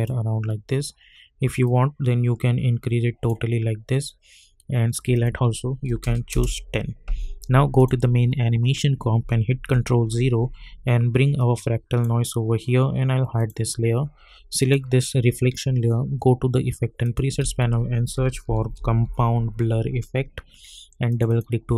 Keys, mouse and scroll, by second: 6.3 Return, 7.8 click, 11.4-13.4 drag, 17.1 click, 17.4 ctrl+a, 17.9-19.5 typing, 21.3 click.